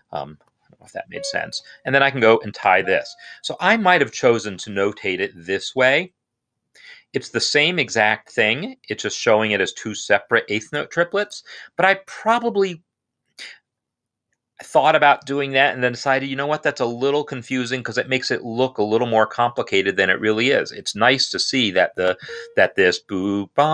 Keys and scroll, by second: 0.3 d, 0.9 Escape, 3.2 shift+=, 3.7 Escape.